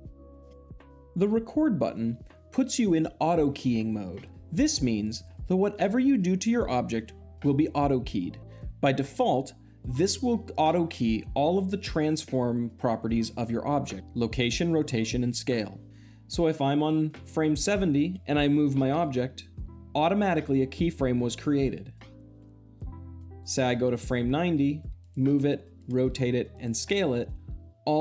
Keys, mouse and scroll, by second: 0.4 space, 16.7-17.8 drag, 18.7 g, 19.4 click, 23.2-24.3 drag, 24.4 g, 24.8-25.2 drag, 25.2 r, 25.6-26.0 drag, 26.0 s, 26.4-27.4 drag.